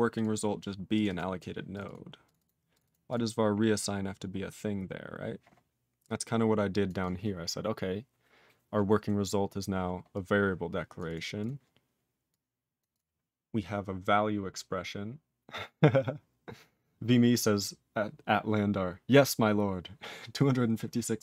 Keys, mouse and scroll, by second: 0.1 click, 0.1 click, 0.9 click, 0.9 click, 1.0 double click, 1.1 double click, 1.7 click, 1.8 double click, 1.8 double click, 2.2 click, 2.2 click, 2.3 double click, 2.4 double click, 2.7 click, 2.7 click, 2.8 double click, 2.8 double click, 3.0 click, 3.1 click, 3.3-5.0 scroll down 14, 6.0 click, 6.8 click, 6.9 click, 7.0 click, 10.1 click, 10.9 click, 11.0 click, 11.1 click, 11.3 click, 11.4 click, 12.2 click, 12.7 click, 12.8 click, 12.9 click.